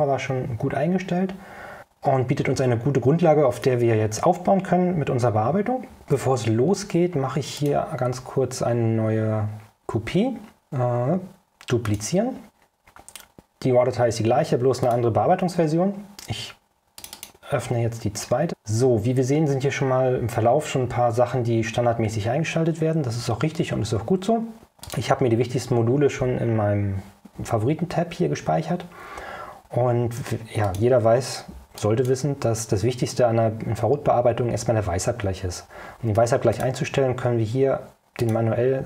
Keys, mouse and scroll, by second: 6.3 Tab, 7.0 ctrl+scroll down 2, 7.7 ctrl+click, 12.0 click, 14.9 click, 17.1 click, 25.0 click, 30.8 click, 31.9 click, 36.6 click, 38.3 click.